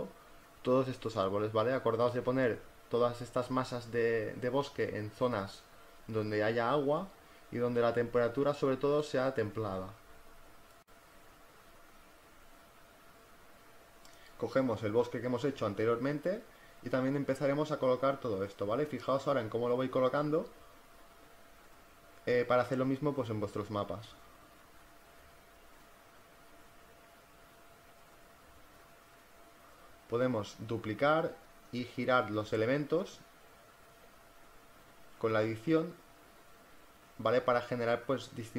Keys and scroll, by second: 0.3 z, 1.1 v, 2.5 ctrl+t, 3.5 Return, 9.4 ctrl+t, 10.7 z, 17.3 v, 22.1 space, 23.3 ctrl+t, 26.6 Return, 33.7 v, 37.6 z.